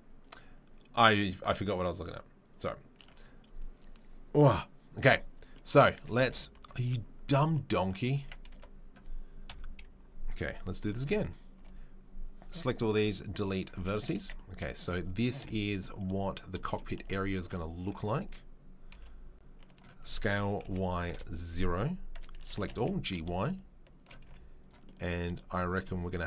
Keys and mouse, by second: 0.0-17.7 middle drag, 8.2 Tab, 8.5 1, 9.5 KP_3, 10.9 z, 11.5 b, 12.9 Delete, 14.2 Tab, 15.4 KP_7, 17.0 Tab, 17.4 1, 17.7 click, 17.8-26.2 middle drag, 18.9 b, 20.0 s, 22.3 a, 22.5 g, 24.2 z.